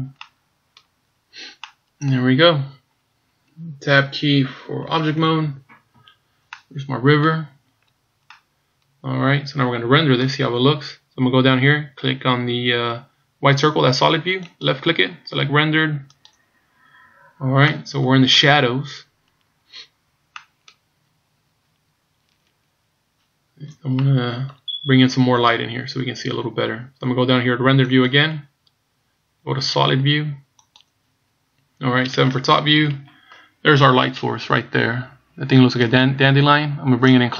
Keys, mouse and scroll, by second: 0.3 middle click, 1.3-1.8 scroll down 1, 1.8 middle click, 2.8-3.5 scroll down 1, 5.2 Tab, 6.1 scroll down 2, 6.5 middle click, 7.6-8.1 scroll down 2, 8.3 middle click, 14.5 click, 18.2 middle click, 21.2 middle click, 24.6 middle click, 28.6 click, 31.7-32.6 scroll down 2, 32.6 KP_7, 36.0 right click, 37.1 click.